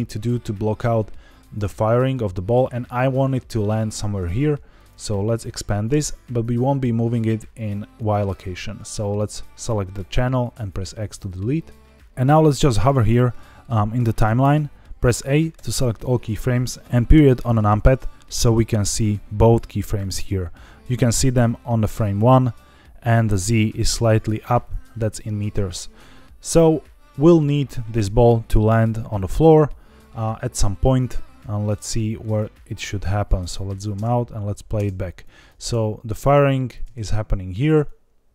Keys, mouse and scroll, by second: 4.7 click, 7.9 click, 10.5 x, 11.8 middle click, 11.8 click, 12.5 click, 12.8 click, 15.5 a, 16.8 middle click, 16.8 scroll up 4, 17.0 KP_Decimal, 17.9 scroll down 2, 18.7 click, 19.9 click, 20.7 click, 20.7 middle click, 20.7 scroll down 5, 21.4-22.2 drag, 22.9 click, 23.7 click, 30.7-31.3 scroll down 5, 31.7-32.3 drag, 32.5-33.0 scroll down 5, 33.2 middle click, 33.9-37.6 typing, 35.1 drag, 36.4 click, 37.8-38.3 drag.